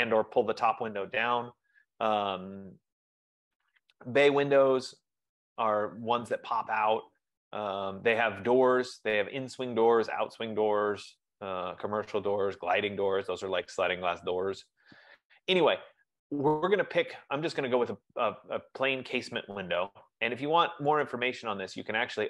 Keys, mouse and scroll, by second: 2.1 scroll, 3.4-4.3 scroll, 4.9 F15, 5.0 middle click, 7.9 middle click, 8.3 middle click, 9.3 middle click, 10.3 middle click, 10.7 middle click, 11.5-12.3 scroll, 12.3-13.3 scroll, 15.3-16.3 scroll, 20.3-21.2 scroll, 21.2 right click.